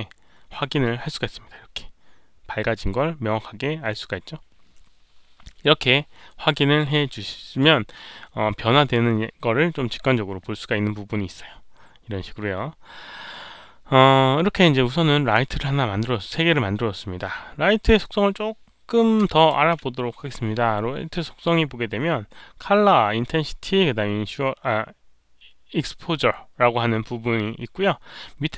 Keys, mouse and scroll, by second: 0.9-7.5 drag, 3.5 right click, 7.5 right click, 11.7 right click, 11.7 click, 15.3-18.0 drag, 19.2 click.